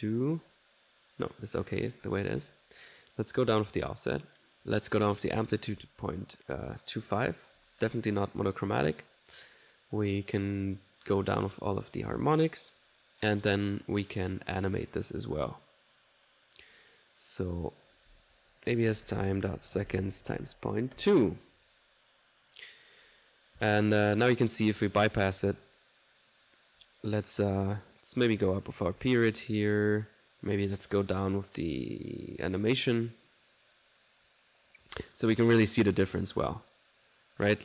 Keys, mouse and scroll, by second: 2.1 click, 3.4-11.3 drag, 11.4 click, 11.7 click, 12.4 click, 13.4 click, 14.5 click, 17.9 click, 22.9 click, 24.5 click, 25.4 ctrl+1, 26.4 middle click, 26.8 click, 27.4 middle click, 27.7 click, 28.5 click, 30.7 click, 32.5-34.4 drag, 34.7 middle click, 34.9 click, 36.2 click, 37.3 click.